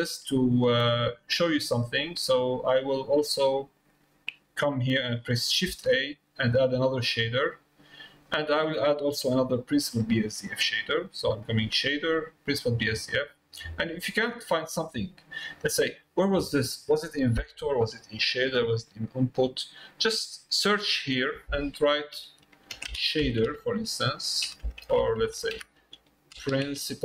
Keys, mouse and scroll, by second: 0.3 middle click, 1.4 click, 2.3 click, 3.2 click.